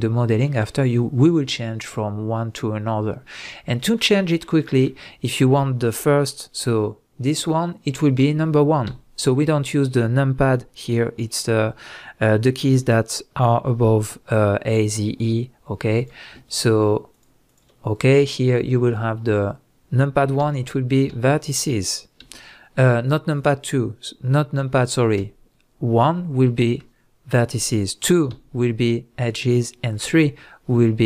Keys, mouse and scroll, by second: 0.4-16.0 middle drag, 8.8 1, 16.0 drag, 16.5 shift+drag, 17.1 shift+click, 17.4 shift+click, 20.4 a, 22.2 1, 23.4 click, 25.2 1, 28.3 2, 30.0 3.